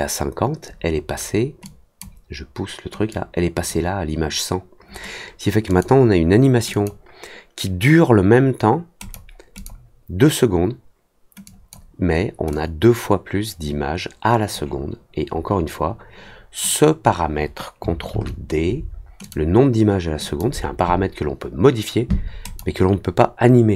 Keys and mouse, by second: 1.6 click, 3.0 click, 5.6 click, 6.7 click, 8.9 click, 9.5 click, 11.4 click, 12.5-14.5 drag, 19.2 click, 20.2 click, 22.4 click.